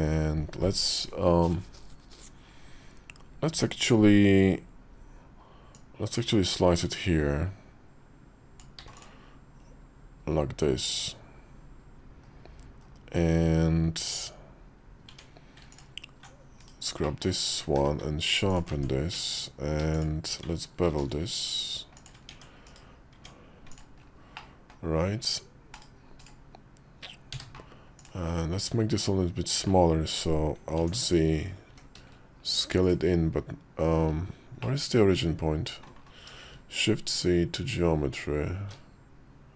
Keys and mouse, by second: 5.7-9.7 drag, 12.0 KP_5, 12.6 KP_5, 15.0 Tab, 15.6 alt+click, 16.4 /, 16.9 middle click, 17.3 Tab, 17.6 q, 18.5 ctrl+click, 18.6 Tab, 19.8 alt+shift+click, 20.7 ctrl+b, 22.2 Tab, 22.5 /, 23.0 Tab, 23.6-26.4 drag, 24.3-26.4 middle drag, 27.2 w, 27.8 click, 28.5 `, 30.7 alt+z, 31.5 s, 34.5-35.7 middle drag, 36.4 shift+s.